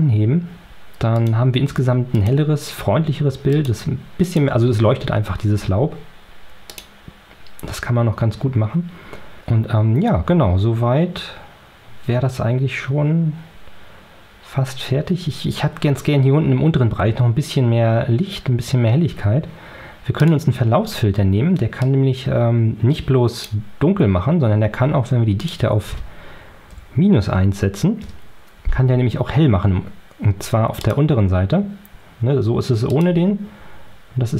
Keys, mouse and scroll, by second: 1.0 click, 2.0 click, 3.5 click, 4.1 click, 6.6 click, 20.1 click, 25.3 right click, 26.6 KP_Subtract, 27.1 KP_1, 27.9 KP_Enter, 30.7 click, 32.8 click.